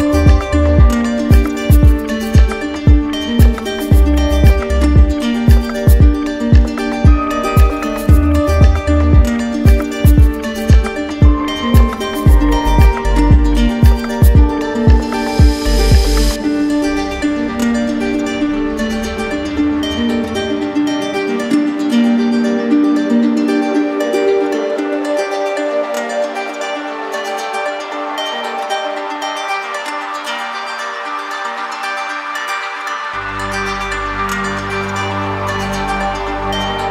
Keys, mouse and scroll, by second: 0.0 click, 1.8 click, 3.8 click, 4.9 alt+click, 6.1 click, 6.5 click, 7.0 click, 9.2 alt+click, 11.6 alt+click, 12.3 click, 12.7 shift+click, 14.3 click, 15.3 click, 15.7 shift+click, 16.6 alt+click, 19.3 alt+click, 19.9 click, 20.5 click, 24.3 right click, 25.5 right click, 25.8 alt+right click, 26.5 right click, 27.0 right click, 27.4 shift+right click, 28.3 shift+right click, 29.0 alt+right click, 29.5 right click, 31.4 right click, 32.1 alt+right click.